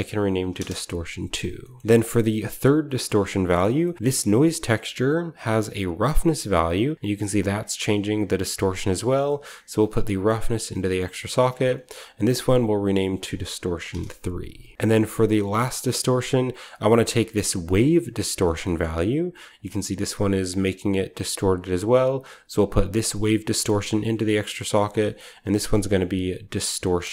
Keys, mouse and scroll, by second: 0.3 BackSpace, 0.4 BackSpace, 0.5 Return, 1.8 scroll up 1, 1.8 typing, 3.0-3.3 middle drag, 3.0-5.7 scroll up 1, 3.5 middle drag, 3.9-5.7 middle drag, 5.7-9.8 drag, 5.7-7.4 scroll up 1, 8.9 right click, 12.4 ctrl+v, 13.6 BackSpace, 13.7 3, 13.8 Return, 14.7 g, 15.5-16.6 scroll down 1, 16.6-17.6 middle drag, 16.6-17.6 scroll up 1, 16.6 typing, 17.6-19.4 drag, 17.6-18.3 scroll up 1, 18.3 scroll up 1, 19.5-22.7 drag, 21.6-22.1 right drag, 21.8 middle click, 22.7-24.3 middle drag, 24.3 click, 24.9 middle click, 25.1 click, 25.1 middle click, 25.1-26.9 typing, 25.3-26.8 ctrl+drag, 27.0 Return.